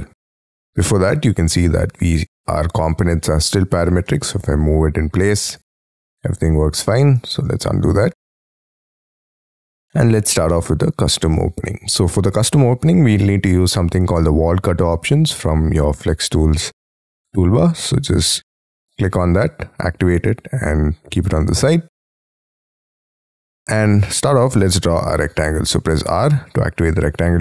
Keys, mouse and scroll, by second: 0.1-0.7 scroll up 10, 1.0 double click, 2.2 m, 4.1 middle click, 7.5 ctrl+z, 7.9 space, 8.3 scroll down 3, 8.5 Escape, 9.2 scroll down 6, 9.5 Escape, 9.8 Escape, 9.9 middle click, 10.8 middle click, 10.8 scroll down 2, 21.9-22.5 scroll down 7, 22.6-23.0 scroll up 5, 23.0 middle click, 24.7 scroll up 4, 25.8 r.